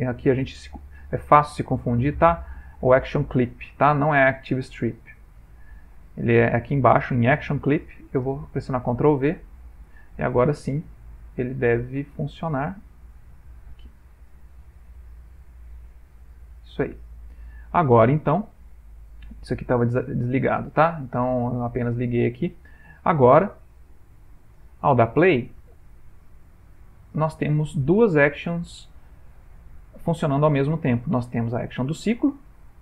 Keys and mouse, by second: 0.3 ctrl+z, 5.3 click, 8.5 ctrl+v, 10.0 click, 13.2 click, 14.3 click, 20.0 click, 20.8 click, 23.0 click, 24.5 space.